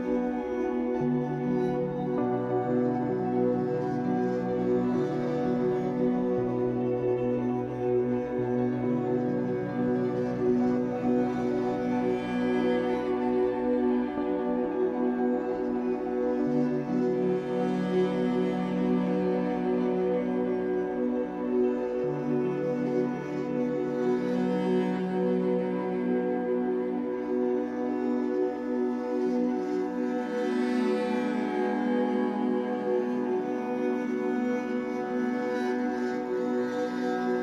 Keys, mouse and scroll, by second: 0.4 click, 0.8-1.2 middle drag, 1.2-1.6 scroll down 1, 1.6-2.6 shift+middle drag, 2.6-3.1 scroll down 4, 3.1-3.6 shift+middle drag, 3.6-4.0 scroll up 5, 4.0 alt+middle click, 4.2 alt+middle click, 4.6 shift+middle click, 4.9 scroll up 2, 5.2-5.8 shift+middle drag, 5.8 click, 6.1 Tab, 7.1 click, 8.4 a, 8.7 shift+d, 10.2 r, 11.1 shift+middle click, 11.3 scroll up 3, 11.6 r, 13.7 g, 14.0 r, 14.8 z, 15.3 shift+middle click, 15.5-15.9 scroll up 1, 15.9 click, 16.3 l, 16.5-16.8 scroll down 5, 16.8 g, 17.3 s, 18.2 g, 18.6 ctrl+z, 18.9 ctrl+z, 19.6 g, 20.1 s, 20.9 g, 21.2 s, 21.8 shift+middle click, 22.0 scroll up 3, 22.3 g, 23.2 click, 23.5 alt+shift+click, 23.6 alt+shift+click, 23.9-24.2 scroll up 3, 24.2 s, 25.3 click, 25.5 alt+shift+click, 25.7 alt+shift+click, 26.1 shift+d, 26.4 s, 27.2 e, 27.8 s, 29.7 l, 30.3 s, 31.6 l, 31.9 s, 32.6 s, 34.3 s, 34.9 g, 35.3 s, 35.8 r, 36.4-37.2 scroll down 1, 37.2 shift+middle click.